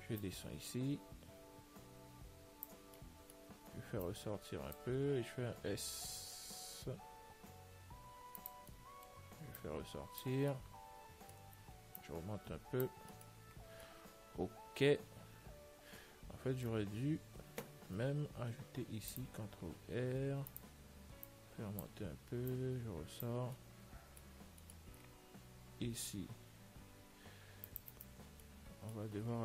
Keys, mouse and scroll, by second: 0.5 click, 3.2-5.9 middle drag, 4.3 click, 6.4 s, 9.0-10.7 middle drag, 9.9 click, 11.2-12.7 middle drag, 12.3 click, 13.4-16.0 middle drag, 19.1 ctrl+r, 21.6-24.6 drag, 23.8-28.2 middle drag, 26.5 ctrl+r, 28.7-29.4 middle drag.